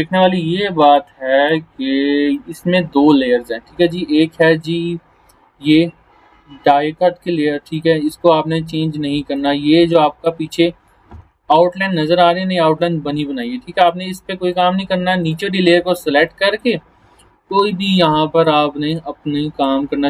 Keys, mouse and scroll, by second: 7.7-10.5 drag, 11.4 alt+scroll up 1, 12.2 alt+scroll down 1, 12.8 space, 13.4 click, 13.6-14.0 space, 14.5 click, 15.8 alt+scroll down 1, 16.2 space, 16.3 click, 18.3 right click, 18.8 click.